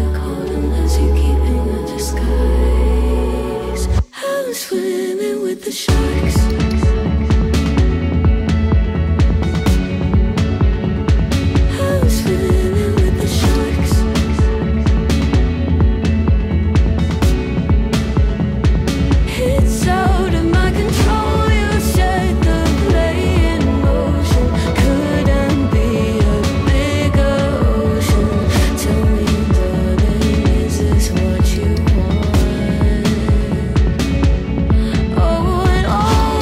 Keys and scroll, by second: 10.0 ctrl+z, 29.7 ctrl+z.